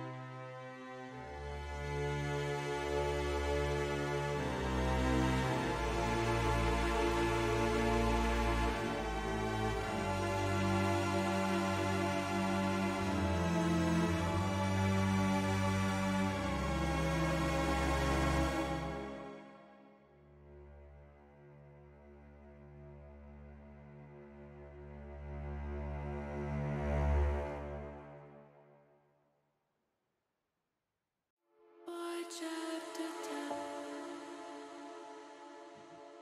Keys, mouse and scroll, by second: 1.0 ctrl+KP_Add, 1.3 ctrl+KP_Add, 1.7 ctrl+KP_Add, 1.9 ctrl+KP_Add, 2.7 ctrl+z, 2.8 ctrl+z, 4.8 ctrl+z, 5.1 ctrl+z, 5.8 ctrl+z, 7.2 click, 16.5 click, 17.2-18.8 drag, 20.6 h, 21.8-23.0 middle drag, 24.0-25.3 middle drag, 26.4 click, 27.6 middle click, 29.4 click, 30.3 click, 31.0 click, 32.8 ctrl+KP_Add, 32.9 ctrl+KP_Add, 33.1 ctrl+KP_Add, 33.2 ctrl+KP_Add, 33.4 ctrl+KP_Add, 33.5 ctrl+KP_Add, 33.7 ctrl+KP_Add, 33.9 ctrl+KP_Add, 34.0 ctrl+KP_Add, 34.4 ctrl+KP_Add, 34.6 ctrl+KP_Add, 34.7 ctrl+KP_Add, 35.0 ctrl+KP_Add.